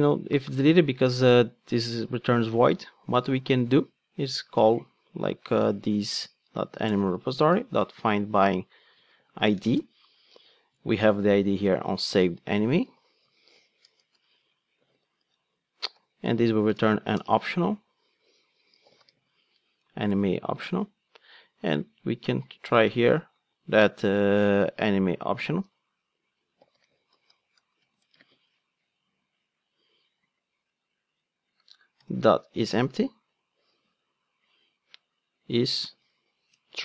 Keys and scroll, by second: 6.9 Return, 11.6 super+c, 12.9 super+v, 15.2 Return, 16.7 alt+Return, 20.0 alt+Return, 21.9 super+x, 28.9 ctrl+space, 32.6 Return.